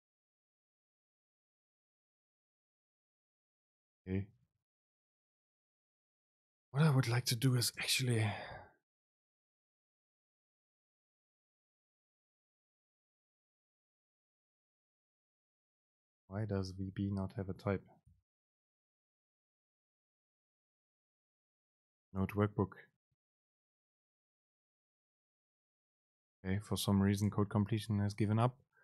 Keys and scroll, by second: 4.4 Down, 5.4 Up, 6.1 Up, 7.8 super+space, 8.7 Up, 9.0 End, 9.3 Left, 10.1 BackSpace, 13.4 Down, 13.8 Left, 14.2 super+space, 15.2 Right, 15.6 BackSpace, 16.3 Return, 17.7 BackSpace, 18.9 Left, 19.7 alt+super+t, 21.0 ctrl+shift+super+t, 23.4 Right, 25.1 super+space, 28.0 Right, 28.2 Down, 28.7 End.